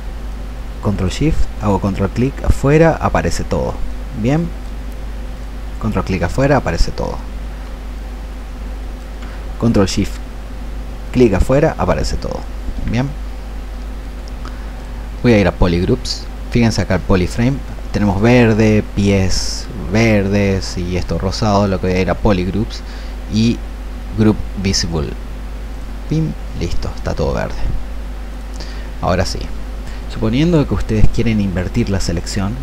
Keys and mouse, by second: 0.2-5.1 ctrl+shift+drag, 8.0-15.3 ctrl+alt+shift+drag, 30.4-32.6 ctrl+shift+drag.